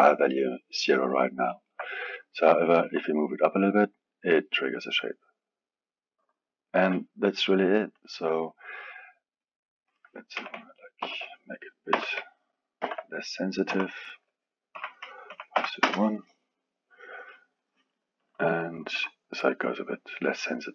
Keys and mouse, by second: 1.5 alt+middle click, 2.3-3.6 drag, 3.6 g, 7.9 click, 9.4-12.6 drag, 18.2 click, 18.8 g.